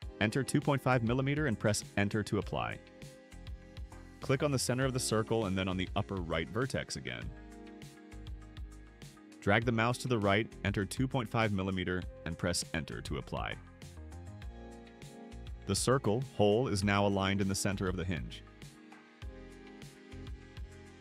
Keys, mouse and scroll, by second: 0.9-2.6 typing, 4.2 click, 9.0 click, 10.9 click, 12.0-13.7 typing, 13.9 Return.